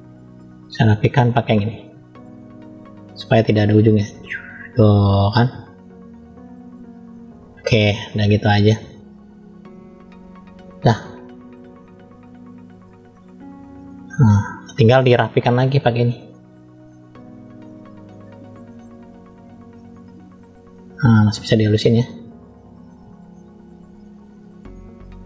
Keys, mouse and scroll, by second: 0.3 middle click, 2.2 click, 3.0 middle click, 4.1 click, 6.1 scroll down 1, 6.8 click, 9.2 click, 11.1-12.3 drag, 12.7 middle click, 13.5 scroll down 1, 14.1 middle click, 15.3 click, 15.9 middle click, 16.9 click, 18.6 middle click, 19.3 click, 21.4 click, 22.8 middle click, 23.5 shift+middle click, 24.5 click.